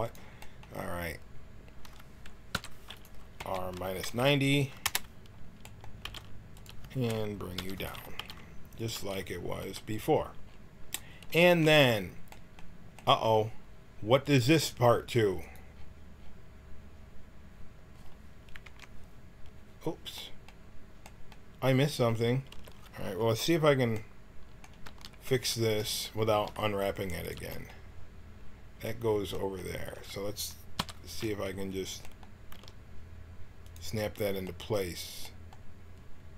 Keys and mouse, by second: 2.5 l, 2.9 right click, 3.4 r, 6.0 g, 7.5 l, 8.1 g, 9.6 g, 14.2-17.5 drag, 18.6 KP_Decimal, 22.5 a, 24.8 l, 26.3 g, 30.8 l, 32.5 g.